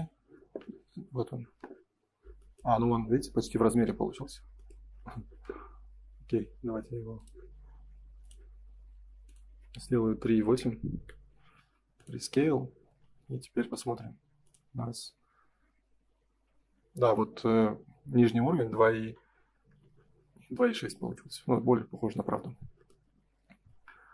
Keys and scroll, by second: 10.9 Return, 12.5 space, 13.6 l, 19.6 Escape, 20.5 space.